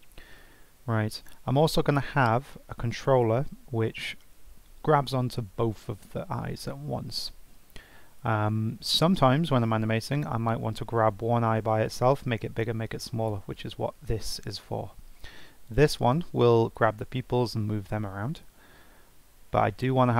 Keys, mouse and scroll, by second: 13.9 g, 15.6 click, 16.8 g.